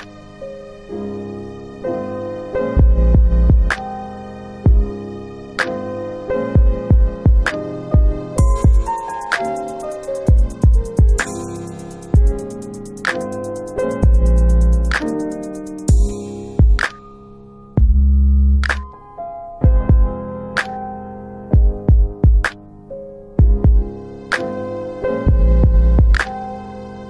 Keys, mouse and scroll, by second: 7.7 click, 9.9 click, 10.4 ctrl+z, 15.3 click, 15.4 click, 18.3 click, 22.3 click.